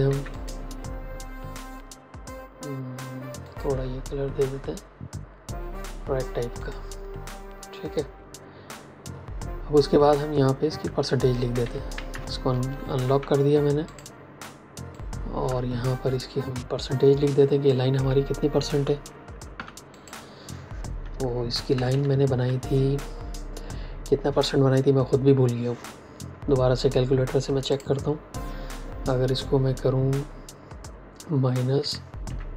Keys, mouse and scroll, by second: 0.0 x, 0.2 click, 3.4 click, 6.5 click, 11.5 v, 12.4 ctrl+alt+2, 13.7 click, 19.4 t, 19.8 click, 21.6 Left, 27.6 click, 31.7 KP_Subtract, 32.2 KP_1, 32.4 KP_0.